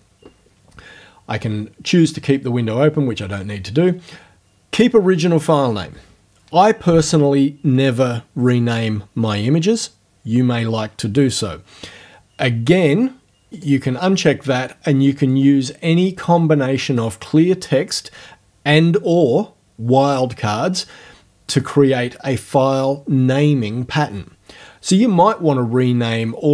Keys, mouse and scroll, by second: 13.6 click, 15.3-17.1 drag.